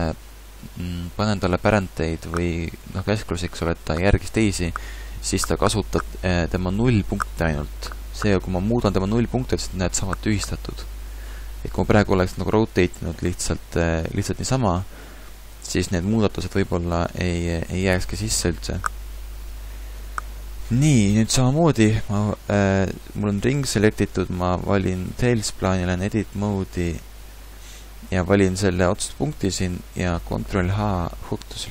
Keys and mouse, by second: 13.7 r, 17.2 middle click, 23.0-26.1 drag, 26.1 Tab, 28.1 click, 29.3-30.8 middle drag, 30.4 ctrl+h.